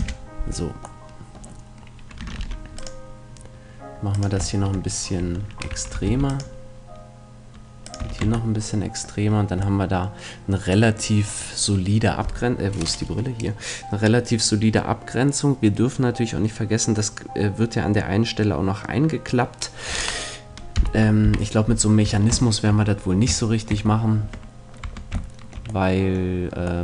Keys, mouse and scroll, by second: 0.5-2.6 middle drag, 2.4 ctrl+r, 4.6-6.6 drag, 5.2 Tab, 5.7 Tab, 6.0 ctrl+r, 8.0 click, 8.0 a, 8.2 Tab, 8.5-9.6 middle drag, 20.8 KP_1, 21.2 KP_3, 22.0 Tab, 24.2 Tab, 24.8 Tab.